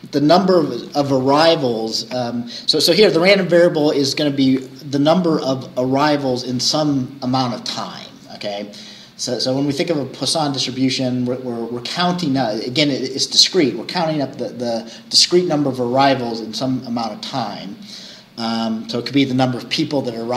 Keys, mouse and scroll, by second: 2.6-6.9 scroll up 1, 6.9-11.1 scroll up 1, 11.1-15.4 scroll up 1, 15.4-19.7 scroll up 1, 19.7-20.3 scroll up 1.